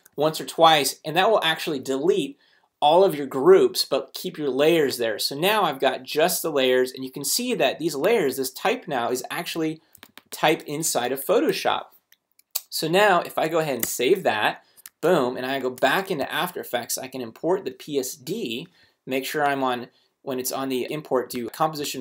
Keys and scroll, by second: 9.5 t, 11.3 Escape, 13.8 super+s, 14.8 super+Tab, 16.2 super+i, 17.0 super+Right, 17.4 Down.